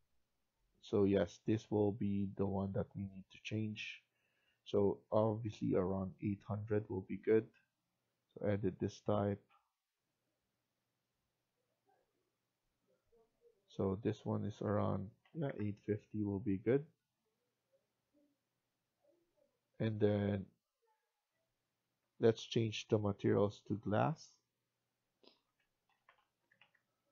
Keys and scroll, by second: 14.5-15.9 typing, 21.9 F1, 23.2 F1, 25.6-26.8 typing.